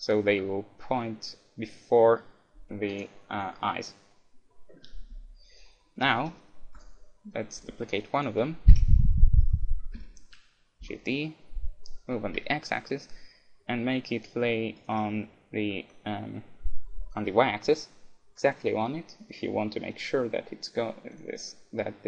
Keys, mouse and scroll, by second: 3.0-4.7 drag, 6.3 middle click, 6.8-10.0 right drag, 8.7 KP_7, 10.0 shift+d, 10.3 middle click, 14.9-16.6 drag, 21.1-22.0 drag.